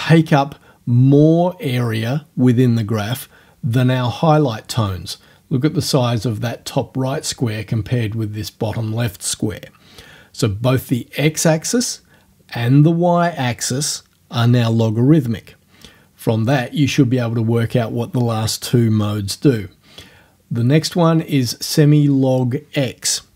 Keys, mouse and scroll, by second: 20.6 scroll down 1.